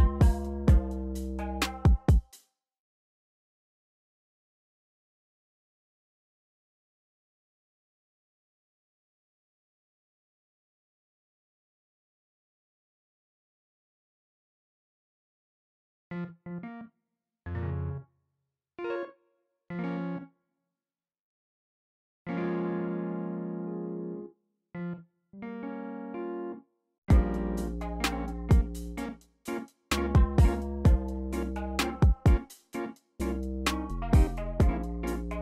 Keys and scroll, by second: 0.0 super+a, 0.4 super+r, 0.7-1.9 typing, 2.7 alt+super+s, 3.4 y, 13.9 y, 27.0 space.